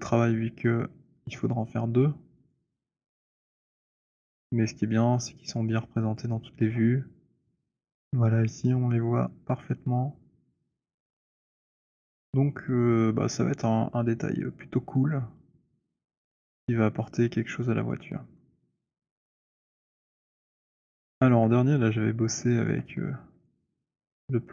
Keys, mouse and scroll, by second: 1.6 click, 2.7 click, 6.2 click, 16.5 click, 19.9 click, 21.5 alt+click, 22.8 click.